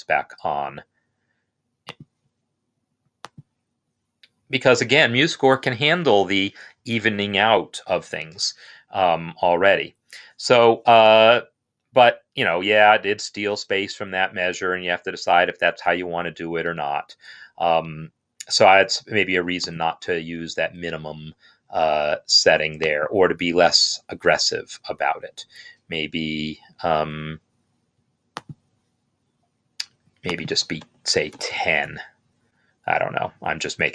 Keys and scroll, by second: 30.7 Left, 31.8 BackSpace, 31.8 1.